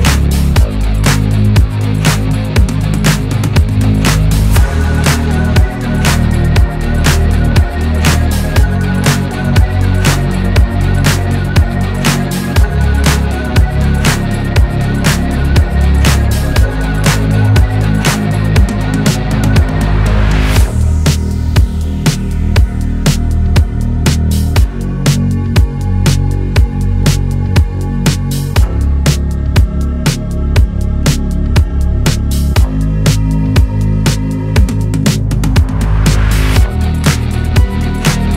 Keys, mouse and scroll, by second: 0.9-1.4 drag, 1.4 Tab, 1.9 Tab, 2.4 alt+z, 3.3 alt+z, 4.0-5.0 scroll down 1, 5.0 click, 5.3 scroll up 1, 6.1 shift+click, 6.4-7.1 shift+middle drag, 7.1-7.7 drag, 7.7 Tab, 8.1 scroll down 1, 8.3-9.6 middle drag, 9.6-10.5 scroll up 2, 10.5 KP_1, 10.9 scroll down 1, 11.1 shift+middle click, 11.4-12.5 scroll up 1, 12.5-13.5 scroll up 1, 13.5 scroll up 1, 13.8 click, 14.1-14.5 shift+middle drag, 14.5-15.3 scroll down 1, 15.3 scroll down 1, 15.4-16.6 shift+middle drag, 16.6 scroll up 1, 16.9-18.1 shift+middle drag, 18.1 /, 18.9 scroll down 3, 19.0-19.5 middle drag, 19.5-20.4 scroll up 1, 20.4-21.1 middle drag, 21.1-23.6 scroll down 2, 23.6 middle click, 23.8-24.1 scroll up 3, 24.1-27.3 middle drag, 27.3 click, 29.2 /, 29.5 middle click, 29.7-30.0 scroll up 3, 30.0-30.7 shift+middle drag, 30.7 Tab, 30.9-34.7 middle drag, 35.1 click, 35.4-38.3 middle drag.